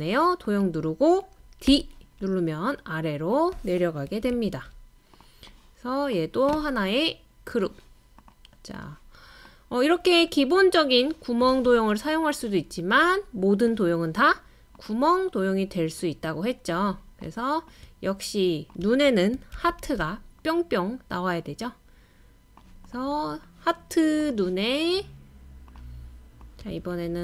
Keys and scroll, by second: 1.7 d, 4.1 Left, 4.3 Left, 19.5 super+c, 19.8 super+v.